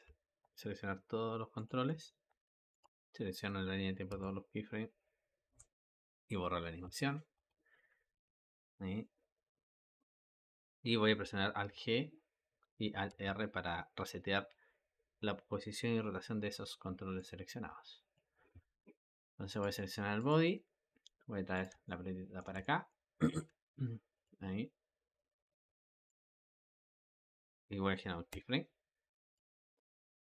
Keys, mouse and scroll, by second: 1.4 click, 1.8 a, 2.6 click, 3.9 a, 5.3 Delete, 6.7 space, 7.2 space, 11.6 alt+g, 12.9 alt+r, 17.0-19.4 drag, 20.0 click, 20.3 g, 21.7-23.2 ctrl+middle drag, 23.2 g, 25.5-26.6 drag, 26.6 g, 28.2 i, 29.2-30.3 drag.